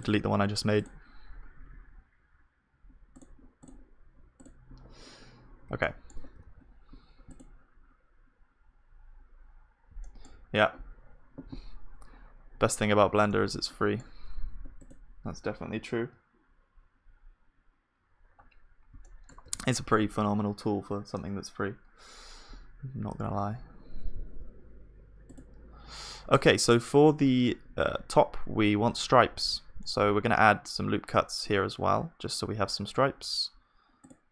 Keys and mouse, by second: 0.7-7.0 middle drag, 0.7-6.4 right drag, 5.8 click, 6.4 ctrl+s, 9.3 middle click, 10.0-15.4 middle drag, 18.6 middle click, 19.5 ctrl+s, 26.4 Tab, 26.4 click, 29.7 ctrl+r.